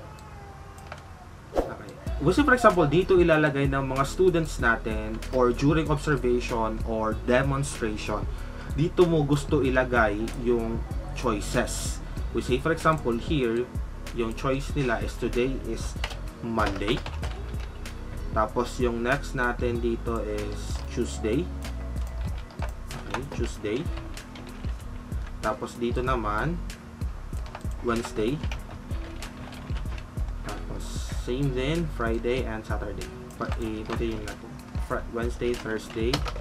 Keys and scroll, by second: 15.9-18.0 typing, 20.1-20.6 typing, 21.9-30.4 typing, 31.9-34.0 typing, 35.1-36.4 typing.